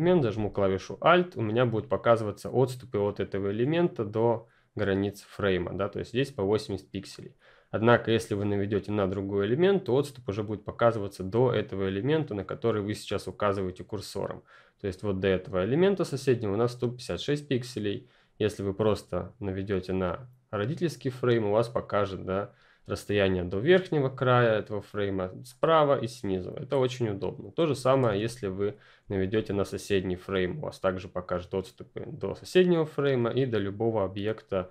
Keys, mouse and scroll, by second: 0.2 alt+click, 28.2-29.0 ctrl+scroll down 2, 29.0-32.7 scroll down 2, 32.7-34.7 alt+scroll down 1.